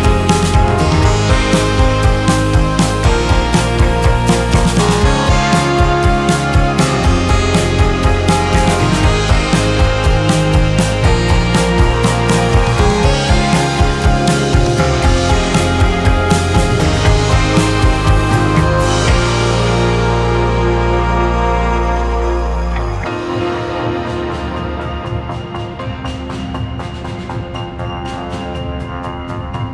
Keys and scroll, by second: 0.8 F2, 2.8 ctrl+k, 5.4 shift+Page_Up, 6.6 c, 7.1 Escape, 25.7 ctrl+z, 25.8 F2, 29.0 ctrl+z.